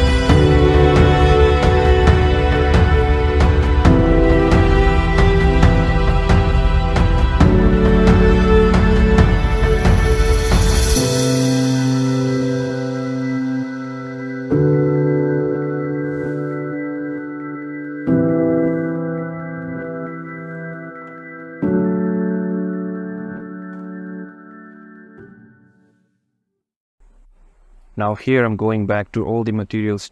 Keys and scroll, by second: 12.1 shift+Tab, 17.9 alt+Tab, 19.6 shift+Tab, 22.0 Tab, 23.1 Tab, 24.4 alt+Tab, 24.7 ctrl+z, 25.3 Tab.